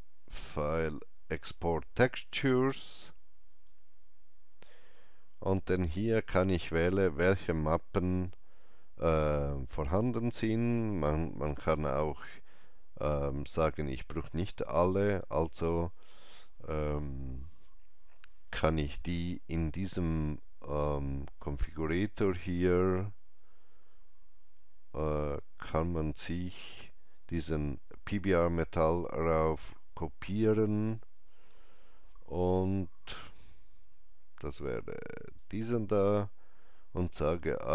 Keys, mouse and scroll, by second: 3.4 click, 6.1 click, 21.3 click, 25.0 click, 29.5 click, 35.2 click.